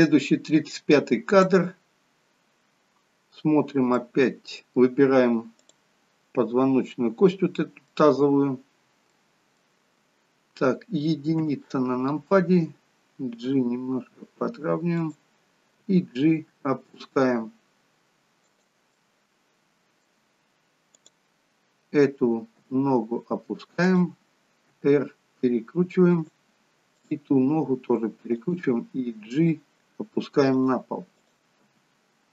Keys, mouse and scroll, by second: 0.0 click, 4.1 middle click, 5.8 click, 6.5-7.0 scroll up 2, 7.0 middle click, 8.5-9.3 scroll down 1, 9.3 middle click, 9.3-11.4 scroll down 2, 11.5 KP_1, 13.6 g, 15.9 g, 19.1 middle click, 21.1 click, 22.8 g, 24.8 r, 27.1 click, 27.5 r, 29.4 g, 31.3 click, 31.8 g.